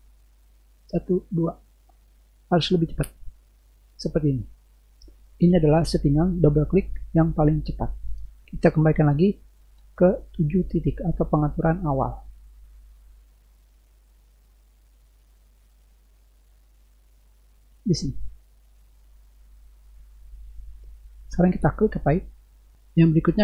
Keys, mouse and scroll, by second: 1.0 click, 1.4 click, 2.3 click, 3.1 click, 3.2 click, 11.3 click, 12.7 click, 14.9 click, 17.8 click, 18.5 click, 19.3 click, 22.0 click.